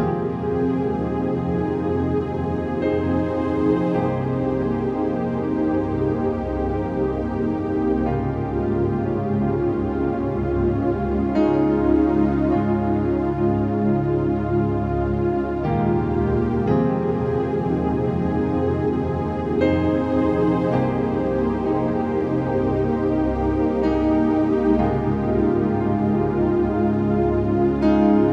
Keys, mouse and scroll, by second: 0.3 ctrl+z, 1.4-3.7 alt+shift+drag, 4.2 click, 4.5-6.4 alt+shift+drag, 7.0-8.5 typing, 8.6 ctrl+a, 8.8 ctrl+c, 9.3 click, 10.5 ctrl+v, 10.8 click, 11.2 4, 11.8 click, 12.6 ctrl+v, 13.1-14.6 drag, 14.6 typing, 16.4-17.1 typing, 17.0 click, 17.5 ctrl+v, 18.2 click, 18.6 6, 19.2 ctrl+a, 19.4 ctrl+c, 19.8 click, 20.4 ctrl+z, 20.8 click, 23.0 ctrl+v, 23.8 click, 24.5-28.3 typing, 25.1 click.